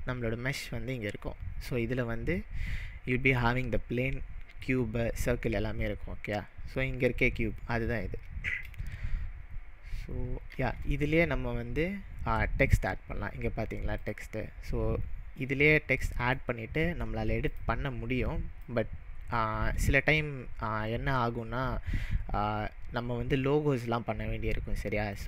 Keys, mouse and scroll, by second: 10.6 shift+a, 14.0 shift+a, 14.1 click, 15.5-17.6 middle drag, 17.6-18.7 drag.